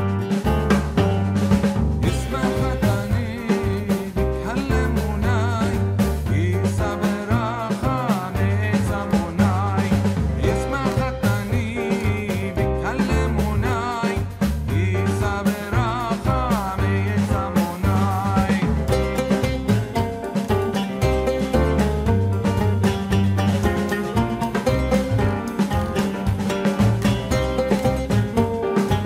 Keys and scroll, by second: 23.9 ctrl+h, 28.3 ctrl+t.